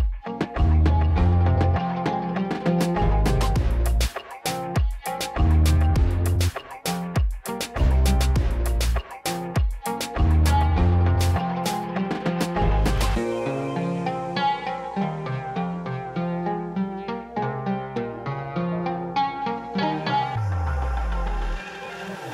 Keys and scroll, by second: 3.5 5, 4.8 Return, 9.1 shift+z, 14.6 g, 16.9 Tab, 18.0 g, 19.3 shift+z.